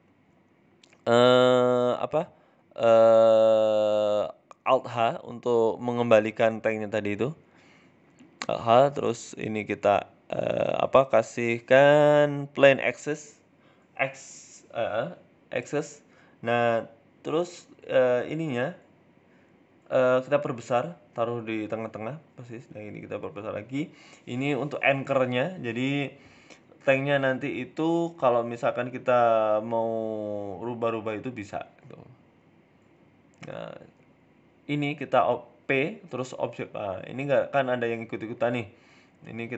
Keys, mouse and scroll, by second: 0.7 middle click, 1.3 Tab, 1.6 Tab, 2.9 alt+h, 3.2-3.8 scroll down 10, 3.8 g, 5.1 middle click, 6.0 ctrl+z, 6.4 a, 6.6 a, 7.4 alt+h, 7.9 g, 8.7 shift+middle click, 9.0 middle click, 9.3-10.0 scroll up 2, 9.7 shift+middle click, 10.0 shift+a, 12.7-13.1 scroll down 2, 13.1 middle click, 14.0 ctrl+z, 14.6 shift+s, 16.2 KP_3, 16.4 KP_1, 16.8-17.7 scroll up 2, 17.0 shift+middle click, 17.8 shift+a, 19.6 s, 20.7 g, 21.8 middle click, 22.4 s, 24.0 middle click, 24.1 KP_1, 24.7 shift+d, 25.7 s, 26.7 middle click, 27.6 g, 29.2 KP_1, 29.9 click, 32.1-32.7 scroll up 2, 32.7 shift+right click, 33.0 middle click, 33.4 shift+right click, 34.4 ctrl+p, 35.1 right click, 35.6 r, 36.6 ctrl+z, 37.0 middle click, 37.9 middle click, 38.4 right click, 39.2 Tab.